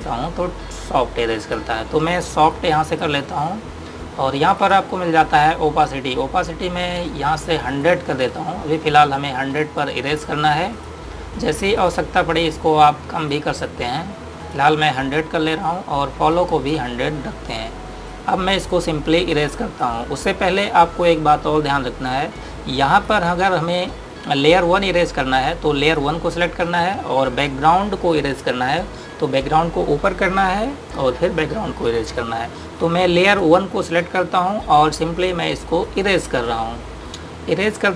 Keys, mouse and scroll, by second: 20.0 click, 23.5 click, 26.6 click, 34.1 click, 36.7 click.